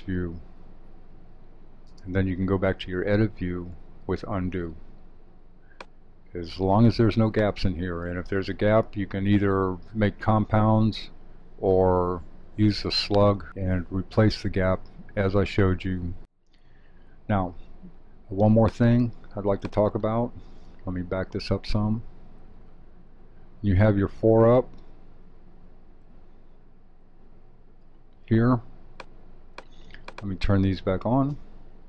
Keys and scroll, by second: 3.7 super+z, 20.8 super+z.